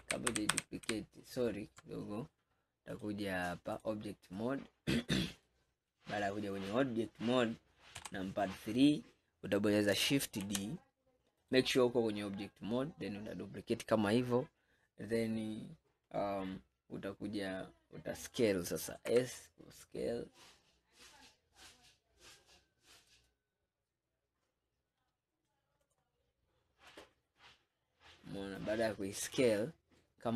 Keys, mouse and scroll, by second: 0.1 ctrl+z, 0.4 ctrl+z, 0.6 ctrl+z, 1.0 ctrl+z, 3.0-4.5 drag, 4.5-5.0 scroll down 1, 5.0-8.0 middle drag, 8.0 KP_3, 9.1 scroll up 2, 10.5 shift+d, 17.3-18.0 scroll up 1, 18.0 scroll up 4, 19.1 s, 26.0 click, 27.0 click.